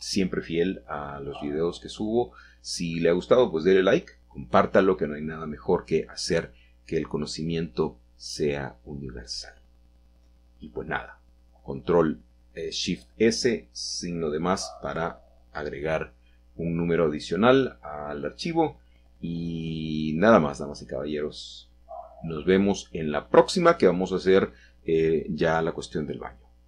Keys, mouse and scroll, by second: 0.1-1.1 scroll down 1, 1.1 middle drag, 1.3 scroll down 1, 1.4-1.7 middle drag, 1.9 middle drag, 7.4-8.3 middle drag, 8.0-9.3 scroll up 5, 12.2 KP_Add, 13.7 Return, 17.2-18.8 middle drag, 19.1-20.4 scroll down 2, 20.4-20.8 middle drag, 21.1-22.0 shift+scroll down 2, 22.2-23.3 scroll down 2, 23.4 shift+middle click, 25.7 middle click.